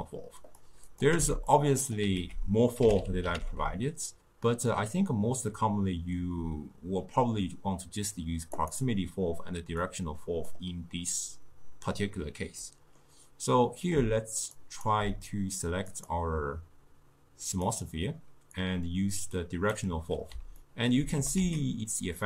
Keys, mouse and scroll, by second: 1.0 click, 1.2 x, 1.6 click, 2.2 ctrl+a, 3.1 l, 3.5 f, 9.9-12.7 drag, 12.7-14.6 middle drag, 14.6 shift+right click, 16.0 click, 18.6 drag, 20.7-21.2 ctrl+middle drag, 21.2 g.